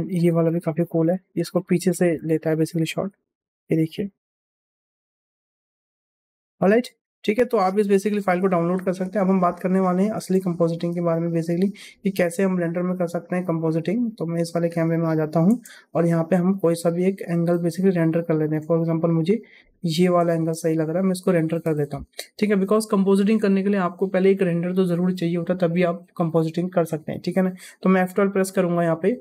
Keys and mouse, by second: 0.1 click, 1.1 ctrl+KP_0, 1.9 space, 6.5 click, 6.7 space, 7.5 click, 8.8 click, 9.0 KP_0, 10.1 KP_0, 11.1 middle click, 12.5-13.7 drag, 14.5 click, 15.4 ctrl+KP_0, 16.8 space, 20.3 space, 22.0-22.4 shift+middle drag.